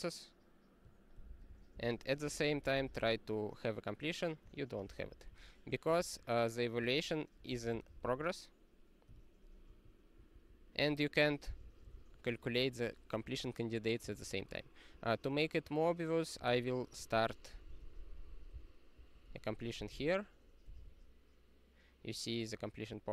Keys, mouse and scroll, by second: 1.4 ctrl+g, 1.5 ctrl+n, 1.7 Return, 2.0-3.5 typing, 4.5 ctrl+a, 4.8 ctrl+space, 5.0 ctrl+n, 5.2 ctrl+w, 6.0 ctrl+p, 7.5 super+o, 8.0 ctrl+c, 9.1 q, 9.6 super+o, 10.3 ctrl+p, 10.7 ctrl+e, 11.1 ctrl+=, 11.5 alt+w, 11.8 super+o, 14.1 ctrl+y, 16.4 super+o, 17.1 ctrl+n, 17.5 ctrl+n, 17.6 ctrl+n, 17.8 ctrl+n, 17.9 ctrl+n, 18.0 ctrl+n, 18.2 ctrl+n, 18.3 ctrl+n, 18.5 Return, 18.9 ctrl+p, 19.1-20.7 typing.